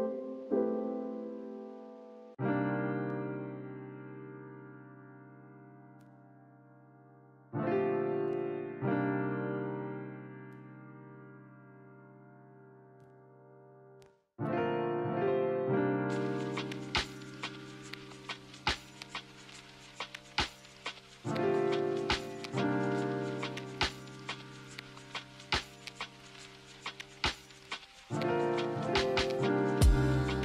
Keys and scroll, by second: 10.2 ctrl+z, 11.7 ctrl+z, 13.9 z, 17.6 k, 24.1 z, 27.7 k.